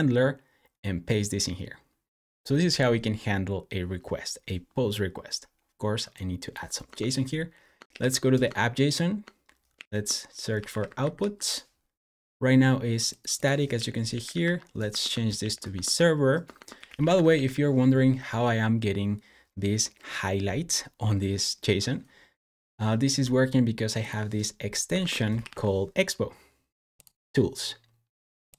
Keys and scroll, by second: 6.7-8.4 typing, 9.6 super+f, 10.3-11.5 typing, 13.4-15.2 typing, 15.5 Escape, 16.4-17.7 typing, 24.8 super+BackSpace, 25.0-25.8 typing.